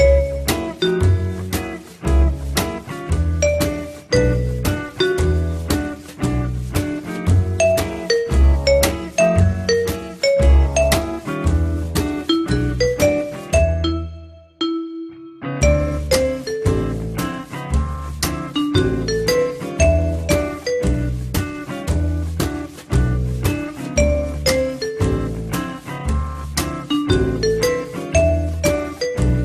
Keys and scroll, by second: 12.0 F3, 27.7 ctrl+z.